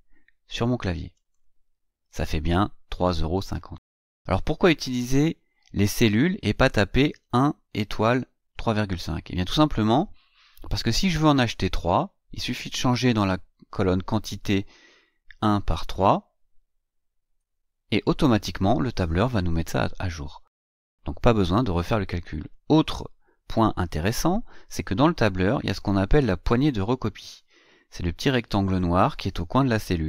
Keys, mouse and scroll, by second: 0.9 click, 11.5 click, 17.1 Return, 22.2 click.